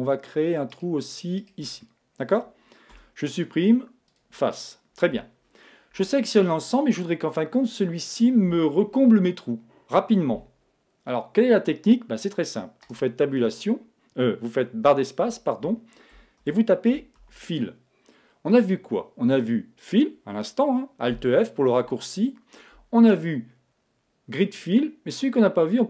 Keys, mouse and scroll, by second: 1.8-3.6 middle drag, 1.8-3.4 right drag, 2.9 x, 4.6-6.4 middle drag, 5.9 a, 12.9 space, 17.3 l.